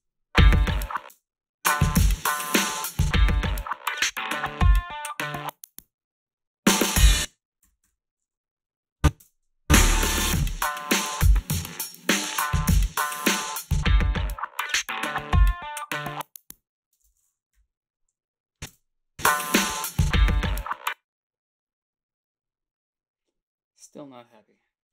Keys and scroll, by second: 1.1 space, 7.0 space, 7.6 -, 7.8 -, 9.2 space, 17.0 space, 18.7 space, 20.6 space.